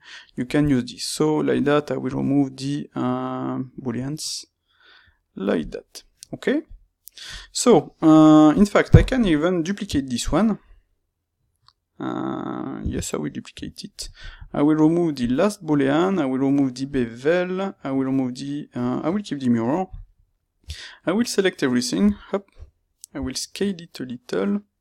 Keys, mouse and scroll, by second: 6.6 click, 8.5 click, 12.7 shift+d, 13.5 Escape, 15.1-20.0 drag, 20.0-24.8 middle drag, 20.5 Tab, 21.9 a.